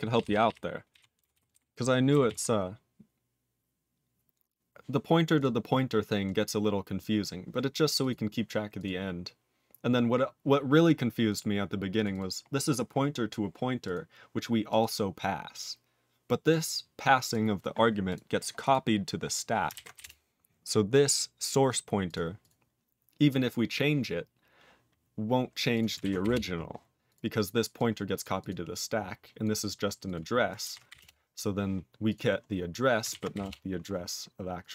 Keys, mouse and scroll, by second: 0.1 ctrl+p, 0.3 ctrl+p, 0.5 ctrl+p, 0.9 ctrl+e, 1.3 ctrl+s, 1.5 ctrl+b, 2.3 ctrl+s, 5.4 click, 6.5-7.2 scroll up 1, 7.2-8.0 scroll up 1, 8.0 click, 8.8 click, 11.9 click, 12.1 double click, 13.8 click, 14.7 click, 16.5 click, 17.3 click, 18.1 click, 18.6 click, 20.0 Return, 21.5 click, 21.7 click, 22.1 click, 22.4 click, 25.7 click, 26.3 Return, 27.1 click, 27.4 click, 27.8 click, 28.2 click, 28.4 click, 28.8 click, 29.4 click, 30.0 click, 30.1 click, 31.0 Return, 32.1 click, 32.1 click, 33.4 Return, 34.6 click.